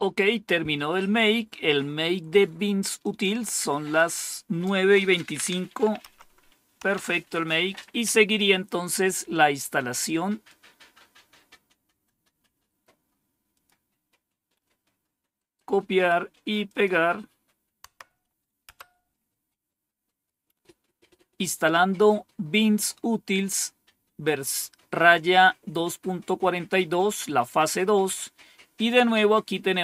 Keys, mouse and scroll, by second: 2.9 click, 6.0 Up, 6.7 Down, 10.3-11.9 drag, 12.5 right click, 13.4 click, 15.2 right click, 16.5 click, 17.8 Tab, 18.6 Return.